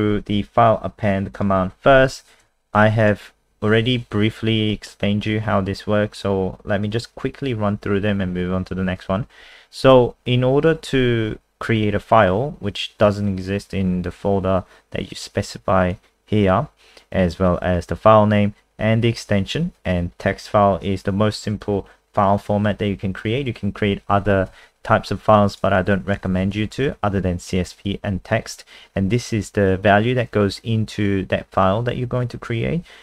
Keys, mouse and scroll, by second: 2.0 shift+Home, 2.4 ctrl+c, 3.0 click, 4.7 ctrl+v, 15.9 click, 24.5 ctrl+s, 25.5 click, 26.4 ctrl+shift+Right, 26.6 ctrl+shift+Right, 26.7 ctrl+shift+Right, 26.9 ctrl+shift+Right, 27.1 ctrl+shift+Right, 27.2 ctrl+shift+Right.